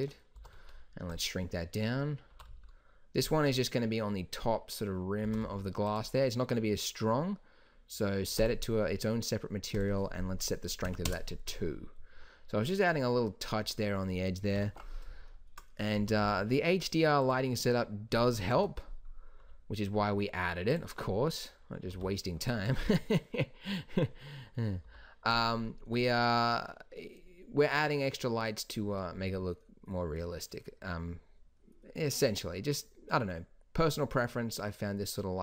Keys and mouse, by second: 0.5 s, 2.4 g, 5.4 s, 14.7 KP_7, 16.1 s, 18.7 KP_7, 19.5 g, 22.1 r, 25.0 r.